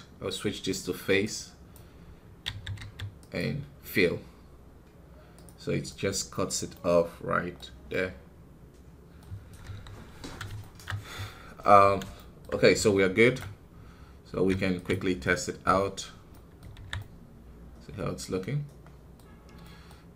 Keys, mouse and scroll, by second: 1.3-3.9 drag, 3.9 scroll down 2, 5.2 click, 5.8-9.4 middle drag, 9.4-9.9 scroll down 3, 9.6 KP_1, 10.5 shift+middle click, 10.9-12.1 scroll up 1, 12.1-13.3 shift+middle drag, 13.3 ctrl+Tab, 14.8 z, 16.2 middle click, 16.7 alt+a, 16.9-20.1 middle drag.